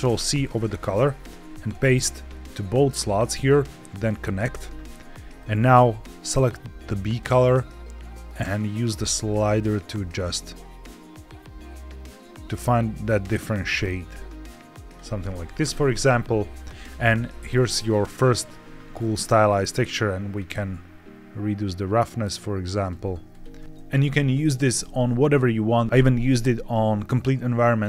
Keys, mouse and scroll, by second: 1.1 ctrl+v, 1.6 ctrl+v, 3.4 click, 5.3 click, 15.6-17.5 scroll up 3, 17.5 scroll up 1, 17.7 shift+middle click, 18.3-18.8 scroll down 1, 19.8 click, 20.4-22.8 drag, 23.2 ctrl+shift+click, 23.6 shift+middle click, 23.6-24.0 scroll down 1.